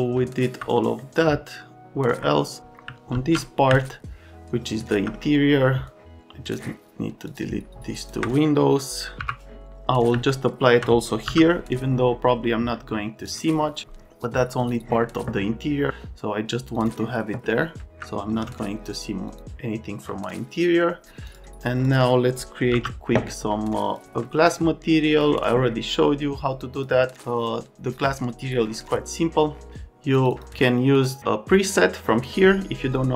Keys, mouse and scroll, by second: 3.1 alt+x, 9.2 Delete, 11.2 m, 14.6 click, 16.8 click, 17.8 alt+middle click, 18.2 f, 19.3 click, 21.3 click, 21.8 click, 23.9 click, 25.1 click, 26.7 click, 30.3 click, 30.9 click, 31.1 click.